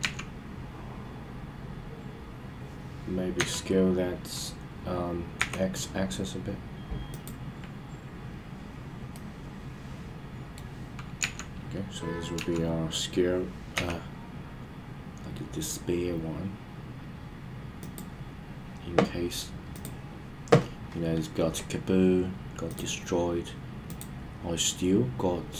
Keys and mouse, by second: 0.0 KP_1, 3.4 s, 5.4 x, 7.1 click, 9.2-10.6 middle drag, 11.2 KP_1, 12.4 KP_3, 13.7 g, 17.8 click, 23.9-25.5 drag.